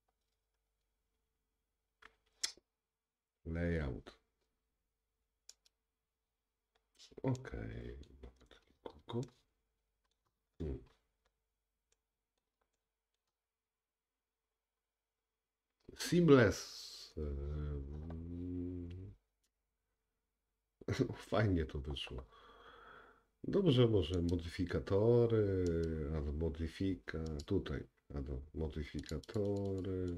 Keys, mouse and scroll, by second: 5.8-24.3 middle drag, 10.5-12.0 scroll up 2, 13.6-14.5 scroll down 2, 24.3 click, 25.7-27.5 drag, 29.0 click, 29.3 click, 29.5 click, 29.8 click.